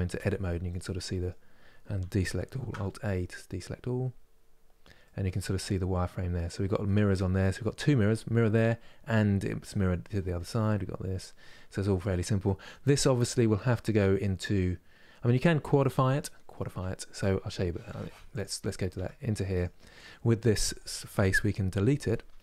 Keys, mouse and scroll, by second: 0.3-2.2 middle drag, 2.2 alt+a, 2.8-4.2 middle drag, 4.2-5.2 scroll down 2, 5.2-13.1 middle drag, 13.1 scroll up 2, 17.5 Tab, 17.9 click, 18.6 Tab, 19.2-20.2 drag, 20.2 3, 20.3-22.4 drag.